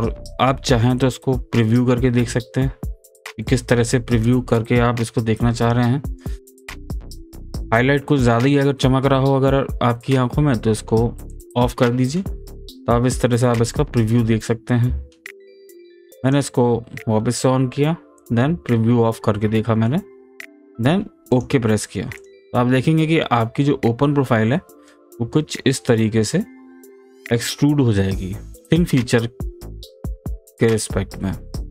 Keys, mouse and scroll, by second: 1.6 click, 3.4-8.3 middle drag, 8.3-11.3 middle drag, 11.3 click, 12.1-16.2 middle drag, 16.2 click, 19.3-21.3 middle drag, 21.3 click, 22.2 click, 22.6-22.9 scroll up 1, 22.9-23.3 scroll down 1, 23.3-25.2 middle drag, 25.2-25.5 scroll down 1, 26.1-31.2 middle drag, 31.6-31.7 middle drag.